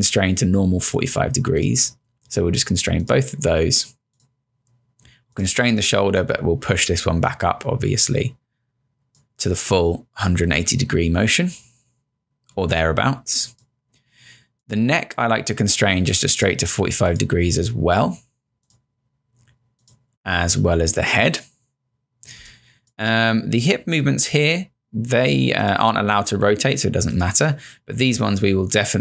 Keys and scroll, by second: 22.4 space.